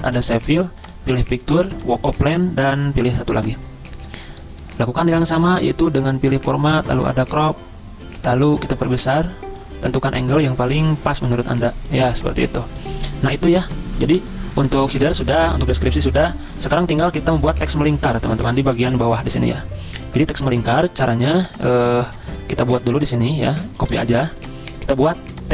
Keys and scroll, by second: 23.9 ctrl+c.